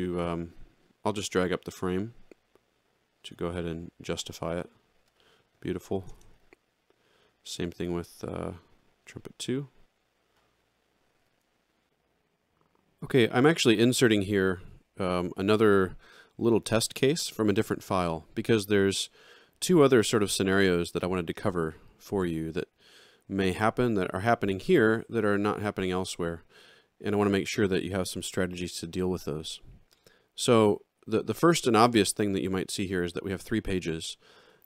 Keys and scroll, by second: 6.1 alt+shift+], 11.2 ctrl+-.